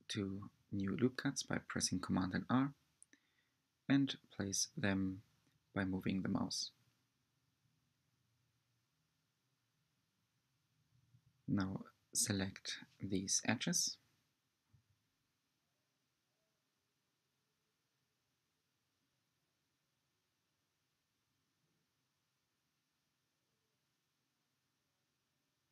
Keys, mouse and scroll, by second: 8.1 2, 9.5 middle click, 10.4-11.1 scroll down 6, 11.1 scroll down 1, 11.1-12.3 scroll up 2, 12.3 click, 14.2 shift+click, 15.0-16.0 scroll up 4, 16.0-16.5 scroll down 3, 16.5-18.0 middle drag, 18.0 shift+drag, 19.6 shift+click, 20.0-22.7 middle drag, 22.7 shift+click, 24.3 shift+click, 25.0-25.7 middle drag.